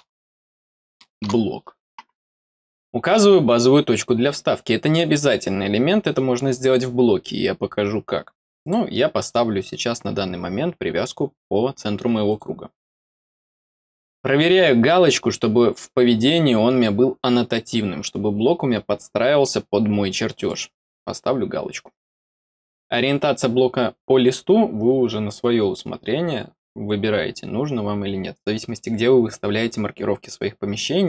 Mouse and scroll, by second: 8.5 click, 12.2 click, 20.3 click.